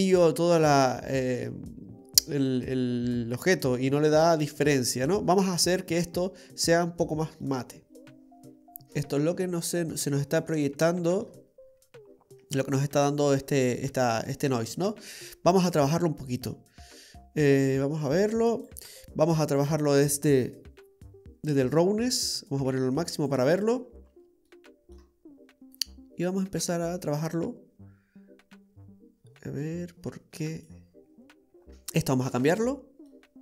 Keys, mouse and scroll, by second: 7.0-7.6 scroll down 3, 7.5 middle click.